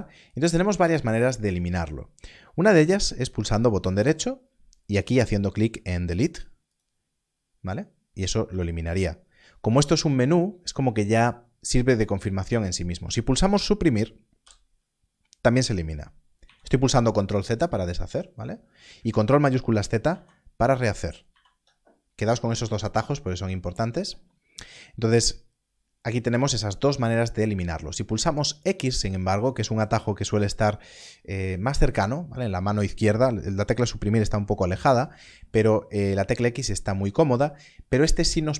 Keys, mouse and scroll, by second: 3.5 right click, 6.7 click, 8.4 ctrl+z, 14.4 Delete, 16.4 ctrl+z, 18.9 ctrl+z, 20.1 ctrl+shift+z, 21.3 ctrl+z, 28.5 x.